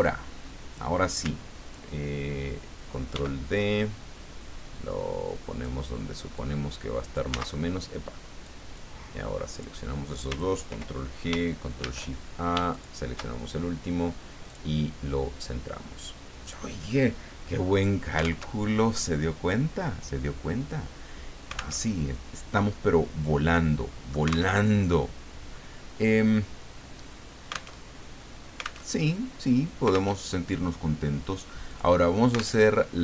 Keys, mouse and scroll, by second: 0.0-1.0 drag, 3.1 ctrl+d, 3.5-5.7 ctrl+drag, 6.3-7.3 ctrl+drag, 7.3 ctrl+z, 8.4-9.9 drag, 10.7 ctrl+g, 11.8 ctrl+shift+a, 12.7 shift+click, 14.5 click, 15.9 click, 16.4 click, 18.4 alt+Tab, 21.8 alt+Tab, 23.3-24.5 drag, 24.5 alt+Tab, 27.7 alt+Tab, 28.8 alt+Tab, 30.2 alt+Tab, 31.7 click, 32.6 alt+Tab.